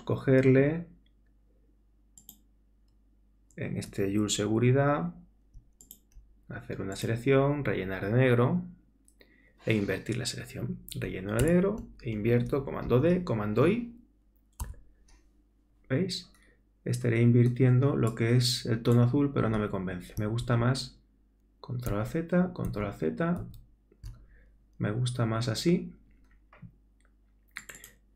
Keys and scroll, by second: 11.4 alt+BackSpace, 12.9 super+d, 14.6 super+i, 20.4 alt+super+z, 21.9 alt+super+z.